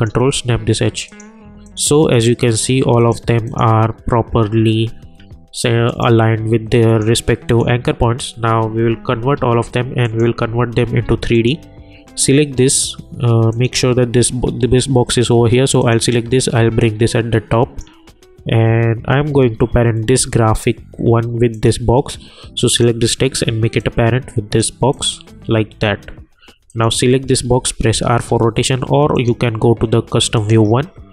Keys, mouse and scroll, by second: 6.0 click, 9.3 ctrl+a, 10.0 click, 10.9 v, 11.3 click, 15.8-20.8 drag, 21.5 click, 27.5 r, 29.1 click.